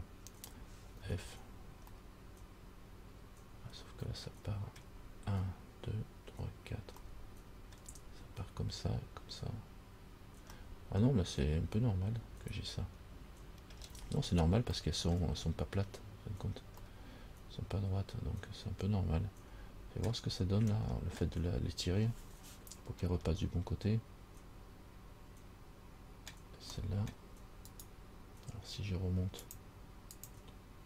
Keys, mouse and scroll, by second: 1.2 f, 2.2 middle click, 7.3 middle click, 11.0 middle click, 14.3-14.9 scroll down 2, 15.0 middle click, 17.1 middle click, 21.0 middle click, 23.4 middle click, 27.0 middle click, 27.9 right click, 29.6 click, 30.5 click.